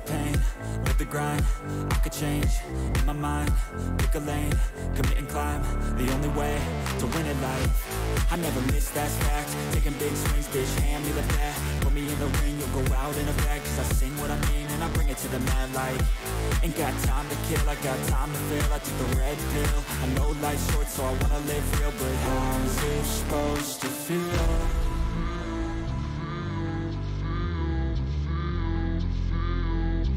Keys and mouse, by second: 1.8-2.9 drag, 5.4 alt+shift+click, 6.8 alt+shift+click, 7.3 alt+shift+click, 9.7 alt+shift+click, 10.3 alt+shift+click, 11.7 alt+shift+click, 13.1 alt+shift+click, 14.6 click, 16.9 alt+shift+click, 19.2-20.2 drag, 21.5 click, 23.3 alt+shift+click, 24.6 alt+shift+click, 25.4 alt+shift+click, 28.3 alt+shift+click, 29.4 alt+shift+click.